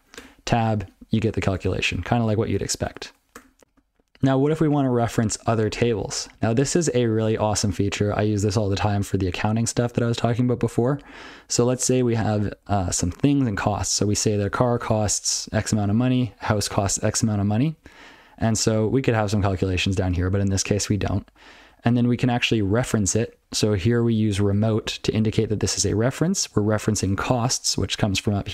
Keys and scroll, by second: 0.2 Tab, 1.6 ctrl+/, 1.9 ctrl+/, 2.3 ctrl+/, 2.6 ctrl+/, 2.8 ctrl+/, 3.3 Tab, 3.6 ctrl+l, 5.9 ctrl+n, 6.2 ctrl+n, 6.6 ctrl+n, 6.9 ctrl+p, 9.0 ctrl+n, 9.2 ctrl+n, 10.8 ctrl+p, 12.1 ctrl+space, 12.4 ctrl+n, 12.8 ctrl+g, 13.2 ctrl+p, 13.6 ctrl+n, 13.8 ctrl+p, 14.0 ctrl+f, 14.2 ctrl+f, 14.7 ctrl+alt+f, 15.3 ctrl+f, 15.7 ctrl+n, 15.9 ctrl+a, 16.1 ctrl+n, 16.3 ctrl+a, 16.5 ctrl+f, 17.6 ctrl+n, 18.4 ctrl+a, 18.9 ctrl+p, 19.3 ctrl+n, 19.4 ctrl+e, 20.0 ctrl+a, 20.3 ctrl+n, 20.7 ctrl+p, 20.9 ctrl+n, 21.1 ctrl+p, 21.3 ctrl+p, 21.6 ctrl+p, 21.7-22.0 ctrl+n, 22.2 ctrl+n, 22.4 ctrl+n, 22.5 ctrl+n, 22.8-23.4 ctrl+f, 23.6 ctrl+f, 23.8 ctrl+f, 24.4 ctrl+alt+f, 24.8 ctrl+alt+b, 24.9 ctrl+alt+f, 25.7 ctrl+f, 26.7 ctrl+alt+f.